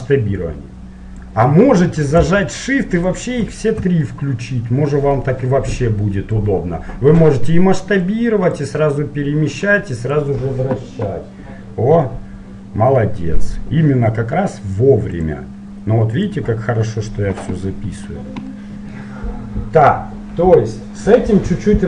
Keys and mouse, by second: 3.1-4.2 drag, 4.2-7.7 middle drag, 8.7-13.0 drag, 18.6-21.8 middle drag.